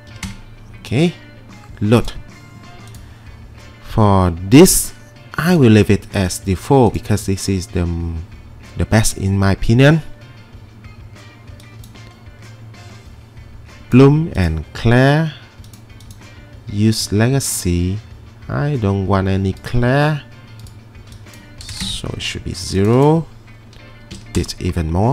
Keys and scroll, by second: 0.1 typing, 0.2 Return, 21.8 typing, 21.9 Return, 24.1 typing, 24.4 Return.